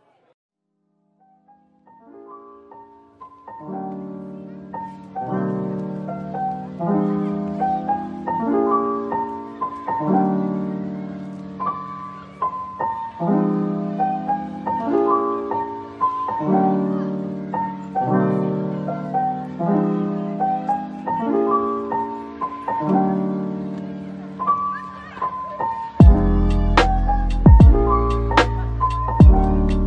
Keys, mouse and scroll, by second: 1.2 typing, 3.8 double click, 4.9 typing, 6.0-6.8 typing, 7.5 double click, 22.1 Tab, 23.5 a.